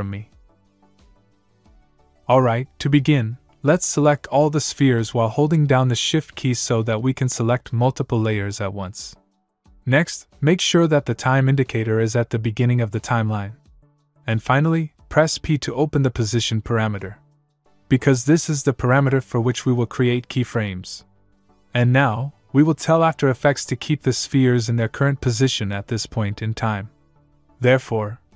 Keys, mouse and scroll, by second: 3.1 click, 4.9 shift+Num_Lock, 6.1 shift+click, 18.2 p.